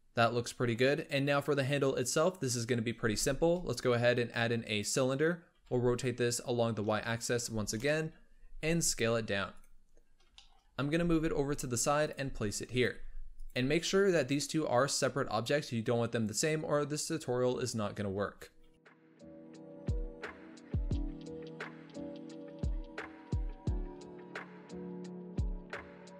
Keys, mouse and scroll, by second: 2.3 KP_7, 2.9 shift+a, 5.5 r, 8.5 s, 10.0-10.3 scroll up 1, 10.3 shift+middle click, 10.6 scroll up 1, 10.8 g, 12.1 s, 12.8 g, 13.9-17.0 scroll down 2, 17.8-18.8 scroll up 2, 18.8 s, 19.3 scroll up 1, 19.5 Tab, 20.0 middle click, 20.2-22.3 typing, 20.2 click, 21.2 middle click, 23.3 g, 23.8 shift+middle click, 24.4-25.5 drag, 25.5 shift+right click.